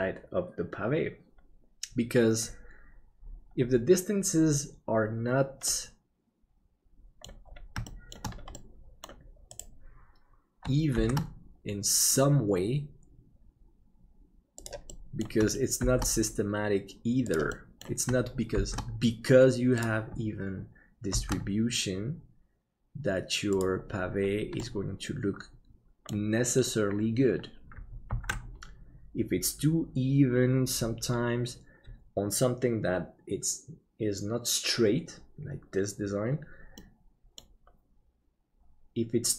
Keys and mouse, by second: 5.8-7.3 middle drag, 7.9 shift+middle click, 8.7 middle click, 11.0 shift+d, 14.8 middle click, 15.8 shift+d, 17.6 middle click, 24.7-26.2 middle drag, 28.3 ctrl+s, 36.9 middle click.